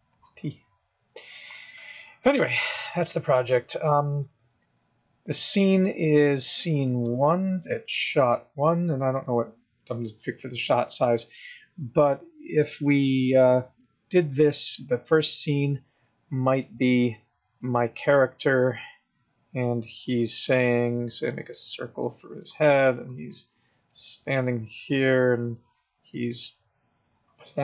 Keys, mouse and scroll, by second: 0.4 click, 7.1 click, 8.4 click, 19.9 click, 20.7 click, 21.8 click, 23.9 click, 24.3 click, 25.1 click, 25.3 click, 25.4 click, 25.7 click, 26.3 click, 27.0 click.